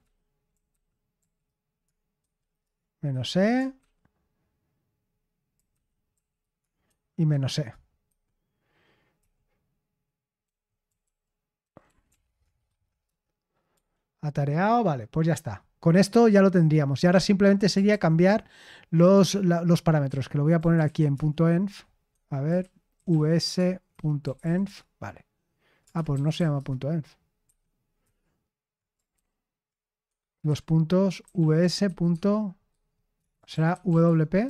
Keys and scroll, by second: 0.0-4.2 typing, 5.2-14.4 typing, 13.7 Escape, 20.0-26.8 typing, 22.0 Escape, 27.4 Escape, 29.1 ctrl+n, 30.0 Escape, 30.4-34.3 typing.